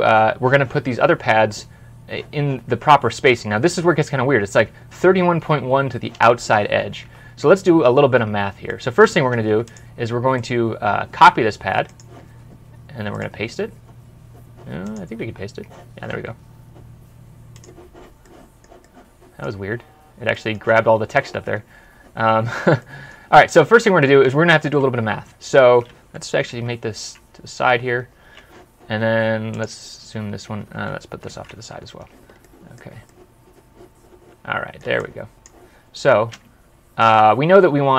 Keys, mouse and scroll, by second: 7.1 alt+Tab, 7.6 scroll up 1, 7.9 scroll down 1, 8.6 middle click, 10.2 right click, 13.0 right click, 15.1 right click, 15.3-17.0 typing, 18.1 middle click, 19.4 scroll up 1, 19.8 scroll down 1, 20.2 middle click, 21.7-22.1 scroll down 1, 22.1 scroll up 1, 22.7 middle click, 26.4 super+Left, 27.5-28.2 scroll up 1, 29.9 scroll up 1, 30.1 ctrl+scroll down 1, 31.1 ctrl+scroll down 1, 31.2 super+Right, 32.3 middle click, 35.7-36.3 scroll down 1, 36.3-37.2 scroll down 1.